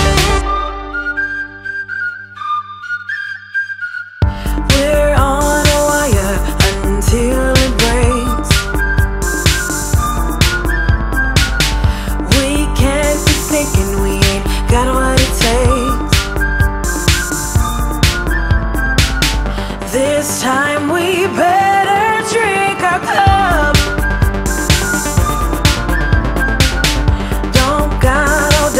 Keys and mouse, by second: 0.3 click, 2.6 click, 4.2 click, 4.9 Up, 5.1 Up, 5.3 Up, 6.5 Down, 7.6 Down, 8.2 Up, 8.5 Down, 10.3 click, 11.9 click, 16.3 click, 19.2 click, 20.9 click, 21.7 click, 22.5 click, 25.4 click, 26.5 click, 26.5 click.